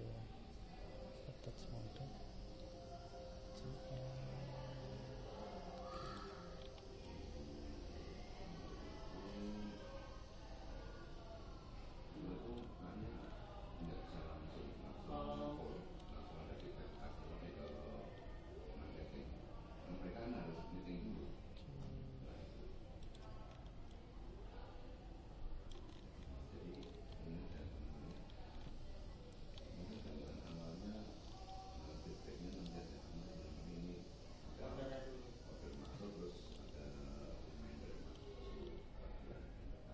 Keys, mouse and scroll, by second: 3.4 g, 6.6-8.7 middle drag, 13.7-15.7 middle drag, 16.6-20.9 middle drag, 20.9 g, 23.5 middle click, 25.7 middle click, 32.4 middle click, 33.8 g, 35.2 g, 36.7-38.5 middle drag, 38.7-39.9 middle drag.